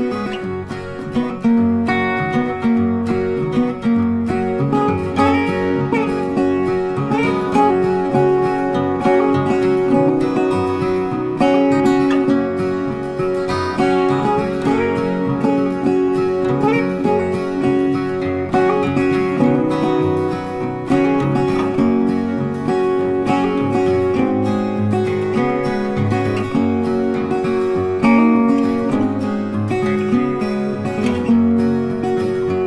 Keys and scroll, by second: 1.8 ctrl+d.